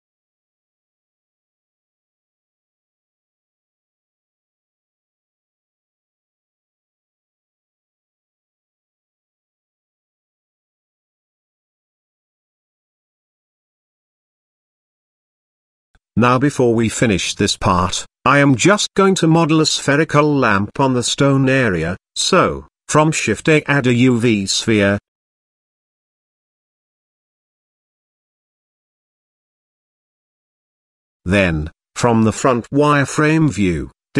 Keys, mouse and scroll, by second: 1.3 g, 3.8-4.1 middle drag, 4.4-4.9 shift+middle drag, 5.4 r, 7.5 g, 9.5-9.9 scroll up 2, 9.7 middle drag, 9.9-10.4 shift+middle drag, 10.6 middle drag, 11.0-11.7 shift+middle drag, 11.9-12.2 scroll up 1, 12.8 click, 14.4 click, 14.7 scroll up 1, 15.0-15.5 shift+middle drag, 16.6 shift+middle drag, 17.1-17.5 middle drag, 17.8 shift+middle click, 18.8 click, 19.5 click, 19.9 shift+a, 22.9 s, 24.1 g, 25.2 middle click, 25.7-26.2 shift+middle drag, 26.6 KP_Decimal, 28.0 Tab, 29.9 KP_1, 30.9 z, 33.4 click.